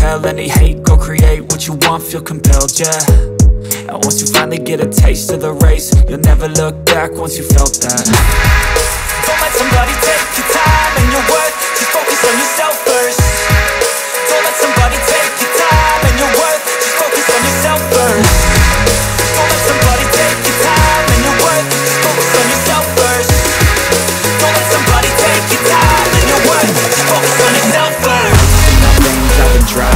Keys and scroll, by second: 3.5 F4, 7.0 F2, 15.6 space, 21.9 shift+F2, 22.9 ctrl+Page_Down, 27.1 ctrl+Page_Down, 27.7 F3.